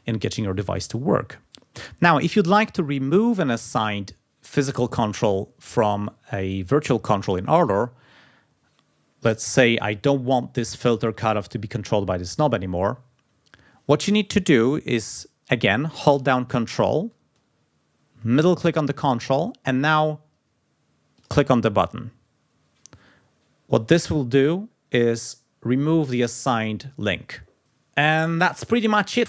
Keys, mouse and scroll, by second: 18.1 ctrl+middle click, 18.1-18.4 ctrl+scroll up 2, 21.1 scroll up 2.